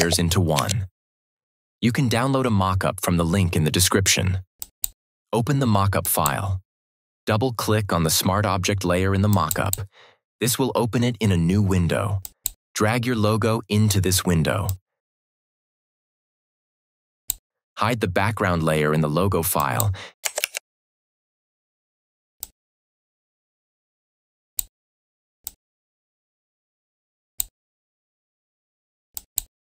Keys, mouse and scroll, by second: 0.5 ctrl+shift+e, 4.5 click, 9.2 click, 12.1 click, 14.5-17.3 drag, 20.3 ctrl+t, 22.3-24.5 drag.